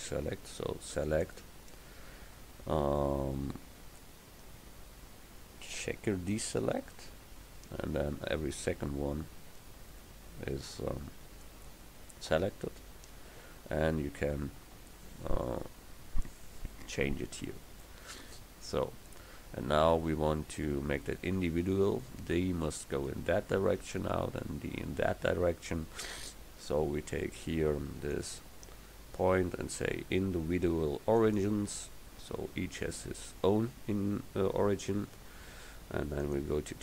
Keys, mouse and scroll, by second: 6.4 click, 21.9 middle click, 23.0-25.9 middle drag, 28.2 click, 35.3-36.3 middle drag, 36.3-36.8 drag.